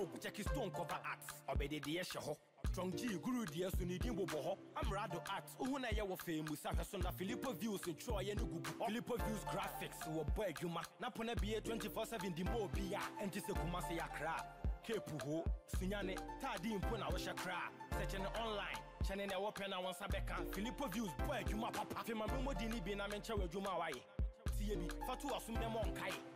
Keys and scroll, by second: 1.1 BackSpace, 23.0 ctrl+-.